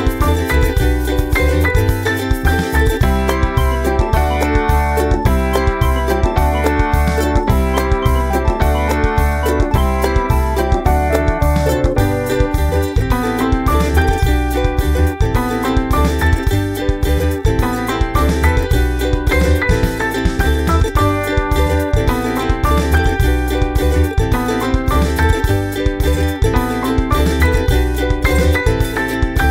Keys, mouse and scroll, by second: 0.0 click, 1.2-3.1 drag, 3.8-4.8 drag, 5.2 click, 6.2 click, 6.6-7.7 drag, 8.0 click, 9.0 click, 9.8 click, 10.5 click, 11.0 click, 11.2 ctrl+scroll up 2, 12.3 click, 12.6-13.6 drag, 13.7 click, 14.1 ctrl+scroll down 2, 15.9 click, 17.7 click, 18.4 click, 19.1 right click, 19.6 click, 20.3 click, 21.2 ctrl+click, 21.4 ctrl+scroll down 2, 21.8 middle click, 22.3 click, 23.1 ctrl+v, 24.3 click, 25.0-29.5 typing, 28.3 ctrl+middle click.